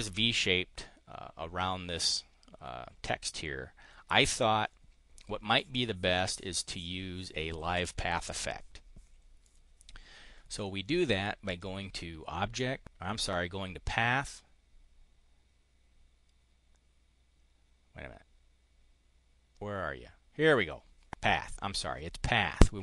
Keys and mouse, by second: 11.4 click.